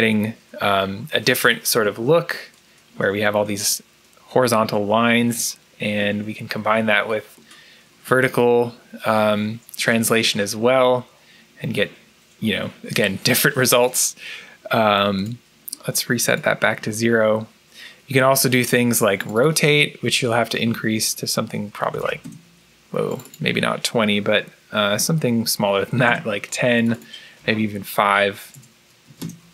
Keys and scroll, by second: 21.6-22.6 typing, 25.9 0, 25.9 Return, 27.3 2, 28.4 BackSpace, 29.1 Return, 29.1 5.